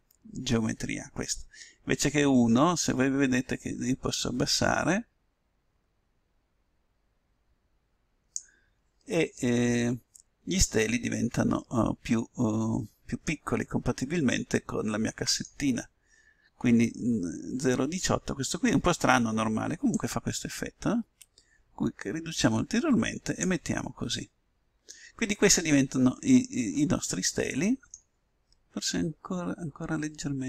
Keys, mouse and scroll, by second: 1.9-3.6 drag, 9.4-11.3 middle drag, 13.5-17.2 middle drag, 19.8-21.6 drag, 24.0-27.4 middle drag.